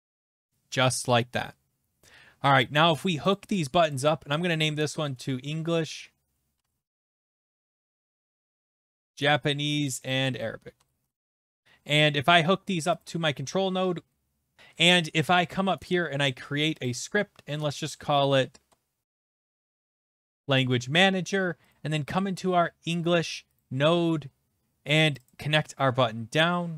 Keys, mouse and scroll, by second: 0.0-0.6 typing, 2.5 click, 3.0 click, 3.9 click, 4.0 click, 4.8-9.3 typing, 8.0 click, 8.1 click, 9.9 click, 10.1 click, 10.5-11.8 typing, 13.0 click, 13.9-15.2 typing, 15.9 right click, 16.8 click, 18.6-20.7 typing, 21.7 click, 23.6 click, 25.1 click, 25.3 click, 26.4 click.